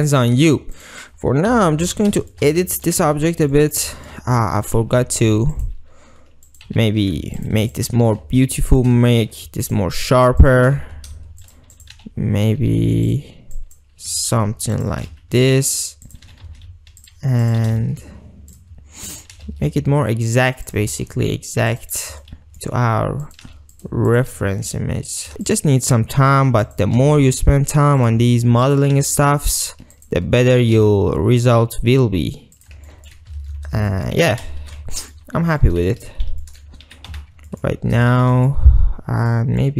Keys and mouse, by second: 0.8 click, 1.5 KP_7, 2.0 Tab, 2.4 shift+drag, 2.9 ctrl+click, 3.3 alt+z, 3.6 ctrl+click, 4.0 shift+click, 5.6 click, 6.6 click, 6.8 g, 7.0 g, 7.8 click, 8.2 g, 8.9 shift+click, 9.4 ctrl+r, 10.1 click, 10.8 g, 11.5 shift+drag, 11.8 click, 12.1 g, 12.6 g, 13.2 click, 14.2 r, 15.0 g, 16.4 g, 16.6 r, 17.2 click, 17.8 g, 18.7-19.3 shift+drag, 19.4 g, 20.8 shift+click, 21.1 ctrl+r, 22.4 shift+click, 23.3 click, 23.7-27.0 typing, 23.9 shift+click, 24.2 click, 25.6 click, 26.8 click, 28.1 shift+click, 29.1 g, 30.1 shift+click, 30.5 click, 30.9 g, 32.7 shift+click, 32.9 ctrl+middle click, 33.5 alt+shift+z, 34.0 ctrl+middle click, 34.3 Tab, 34.7 alt+shift+z, 35.0 ctrl+drag, 35.5 Tab, 35.7 click, 36.5 ctrl+click, 37.2 Tab, 37.5 ctrl+drag, 38.2 shift+click, 38.4 ctrl+click, 38.6 ctrl+middle click, 39.4 click.